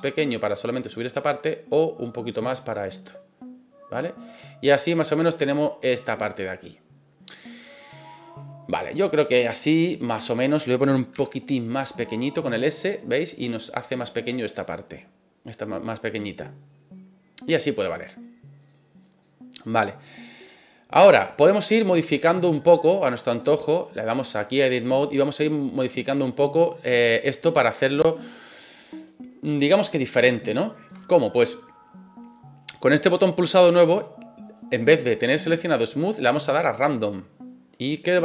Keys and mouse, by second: 3.0-5.9 drag, 6.4 middle click, 7.8-9.8 middle drag, 11.1 s, 14.5 click, 14.9-17.4 middle drag, 18.6 click, 19.8 middle click, 20.7 middle click, 21.3 right click, 22.7-24.6 drag, 26.0 click, 26.7 right click, 27.2 middle click, 27.9 middle click, 30.3 shift+middle click, 34.6-37.2 drag, 37.7 middle click.